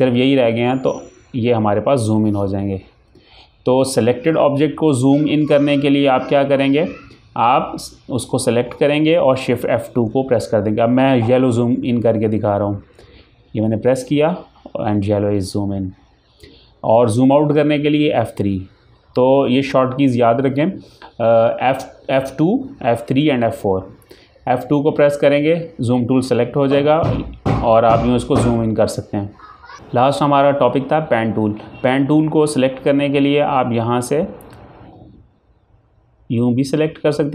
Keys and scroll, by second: 1.8 Delete, 1.9 F4, 9.7 shift+Num_Lock, 13.6 F2, 18.2 F3, 24.7 F2.